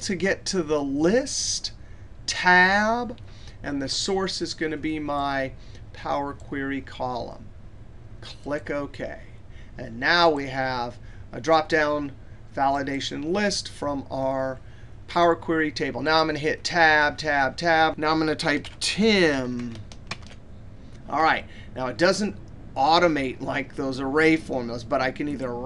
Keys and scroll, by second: 2.2 Tab.